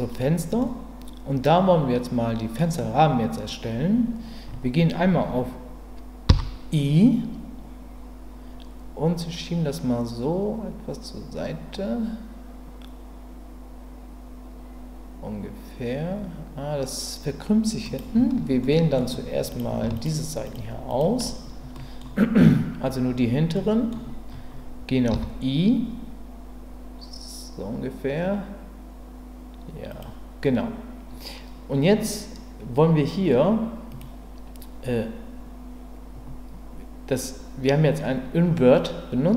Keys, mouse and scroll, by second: 0.6-2.6 middle drag, 18.6 middle click, 19.5 click, 20.5 shift+click, 20.9 shift+click, 21.7 middle click, 23.5 middle click, 33.9 click.